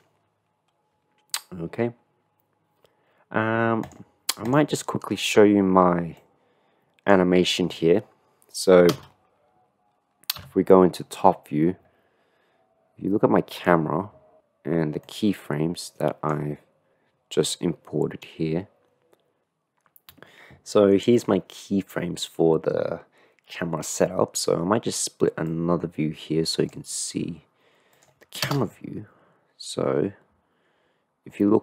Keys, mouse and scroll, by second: 3.9 click, 6.4 click, 9.1 KP_0, 10.4 KP_7, 13.5-15.3 middle drag, 15.3-16.5 drag, 25.6-27.0 drag, 28.7 KP_0.